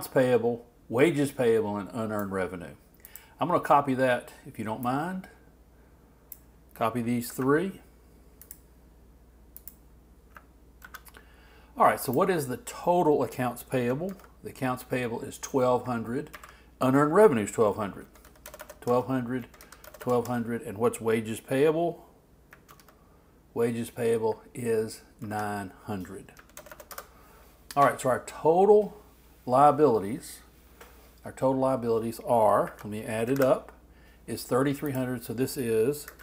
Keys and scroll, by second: 7.3 super+c, 10.8 super+v, 14.1 alt+Left, 16.3 alt+Right, 22.7 alt+Left, 25.2 alt+Right, 33.3 shift+super+t, 35.9-36.2 typing.